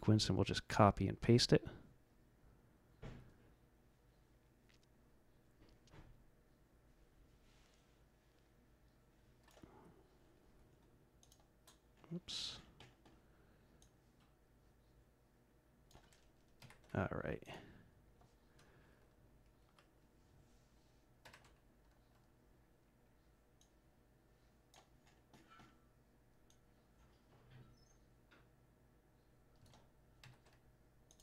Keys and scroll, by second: 16.6 ctrl+c, 21.2 ctrl+v, 30.2 ctrl+c.